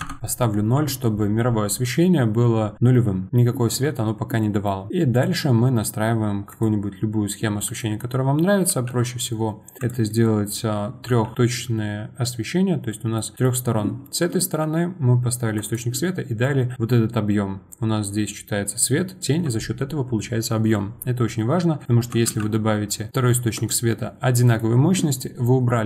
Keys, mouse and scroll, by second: 4.4 middle click, 5.1 click, 6.5 click, 7.6 click, 8.1-8.7 scroll up 1, 8.7 g, 11.7-17.7 middle drag, 17.7-18.5 scroll up 7, 21.3-21.8 scroll up 1, 21.8-22.3 middle drag, 22.3 shift+d.